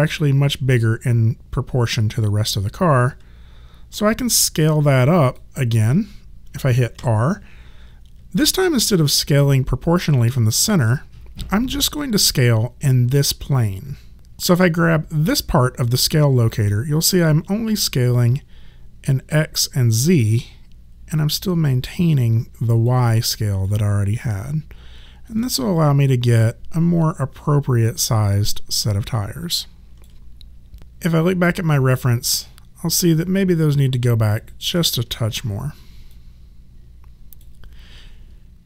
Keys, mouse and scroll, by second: 3.9 r, 5.2 click, 7.0 r, 8.3 alt+click, 10.9 alt+click, 17.0 click, 23.7 alt+click, 30.8 click, 34.4 click, 35.3 w, 36.1 click.